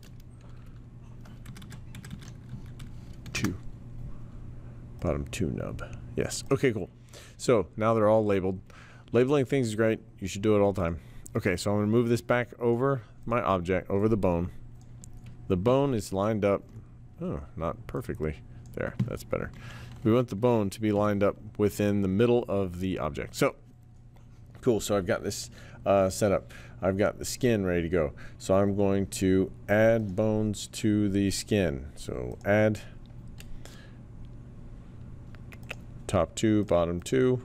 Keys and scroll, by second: 0.0-0.2 typing, 1.4 Left, 1.6 Left, 1.9 Left, 2.1 Left, 2.5 Right, 3.0-3.7 typing, 5.0 typing, 20.9 t.